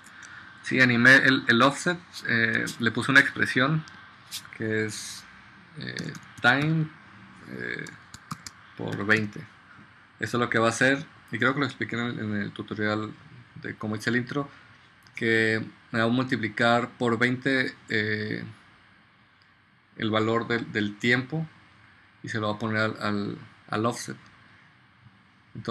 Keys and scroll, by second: 0.1 super+z, 5.8-7.2 typing, 8.9 shift+8, 9.2 0.